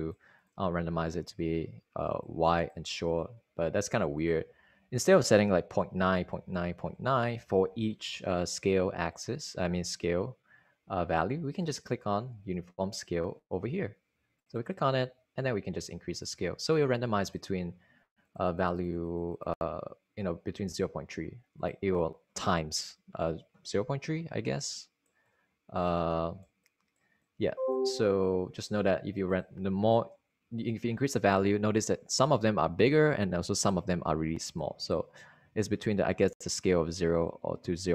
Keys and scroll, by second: 5.1 super+a, 6.0-8.1 typing.